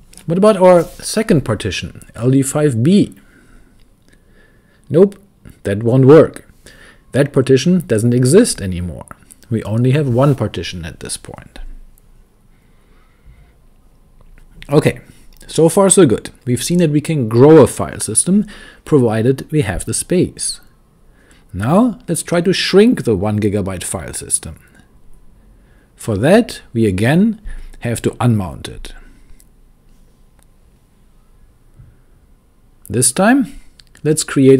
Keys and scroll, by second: 0.0-2.8 typing, 6.1-9.0 typing, 28.0-30.5 typing, 31.8-34.0 typing.